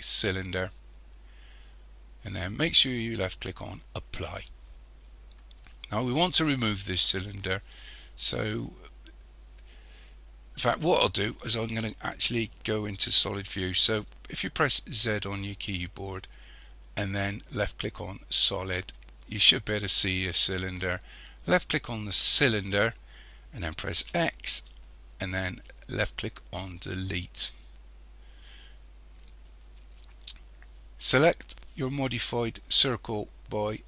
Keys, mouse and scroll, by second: 4.0 click, 15.0 z, 21.5 click, 24.0 x.